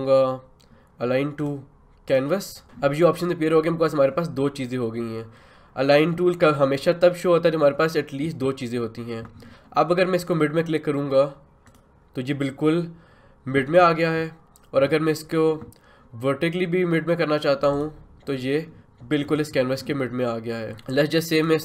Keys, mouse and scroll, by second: 11.7 click, 17.7 click, 20.7 click.